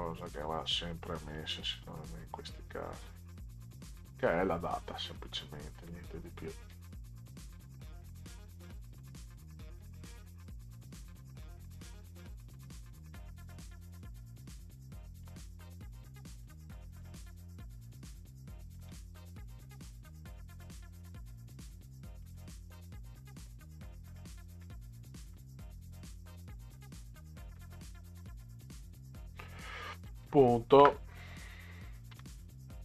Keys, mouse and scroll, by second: 0.3-2.8 drag, 2.9 Delete, 3.2 Delete, 6.7 click, 8.3-10.1 drag, 10.1 Delete, 11.2-13.1 drag, 13.1 Delete, 14.5 click, 16.4 click, 17.0 Delete, 18.0 click, 21.5 click, 23.4 Delete, 25.4 Delete, 30.3 ., 32.1 2.